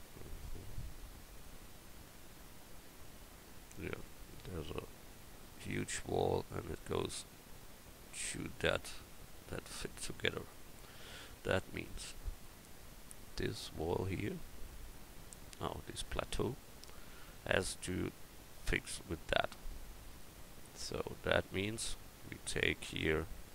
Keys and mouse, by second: 13.2-13.9 right drag, 14.1-14.9 right drag, 20.1 Tab, 21.5-22.9 drag.